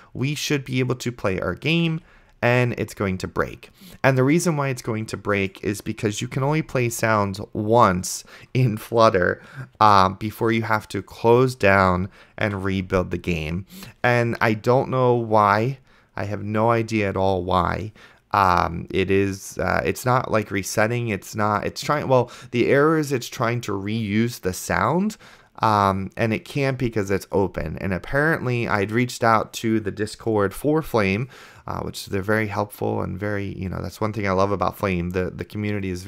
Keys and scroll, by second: 1.9 space, 6.7 super+Right, 12.8 F5.